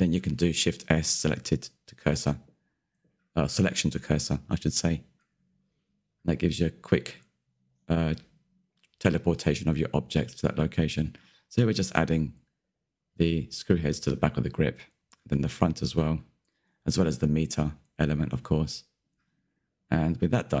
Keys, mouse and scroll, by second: 0.5 click, 1.2 middle drag, 1.4 scroll down 2, 1.5 shift+middle click, 1.7 click, 1.8-2.1 middle drag, 2.1 KP_Decimal, 2.3-3.6 middle drag, 3.6 click, 4.3 click, 4.6 middle click, 5.2-5.5 scroll down 13, 5.4 click, 6.0 click, 6.4 scroll up 2, 6.6 shift+middle click, 6.8 click, 8.0 middle click, 8.4 ctrl+click, 8.9 scroll down 2, 9.0-9.4 shift+middle drag, 9.4 KP_3, 9.6 shift+middle click, 9.9 click, 10.0-10.4 scroll up 3, 10.4 click, 10.5 shift+middle click, 10.7 scroll up 1, 12.1 click, 12.8 scroll up 2, 12.9 shift+middle click, 13.2 click, 14.5 r, 15.2 scroll down 2, 15.3 scroll up 1, 15.5 middle drag, 15.7-16.0 scroll down 1, 16.0-16.8 middle drag, 16.8 click, 17.8 scroll down 1, 17.9-19.5 middle drag, 20.2-20.6 scroll down 1.